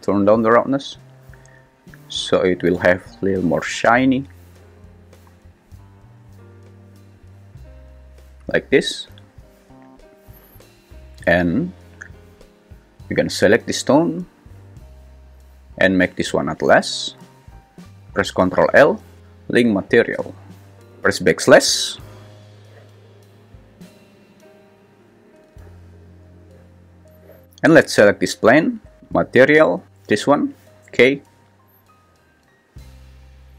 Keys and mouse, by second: 14.2-16.3 shift+drag, 18.5 ctrl+l, 29.0 click.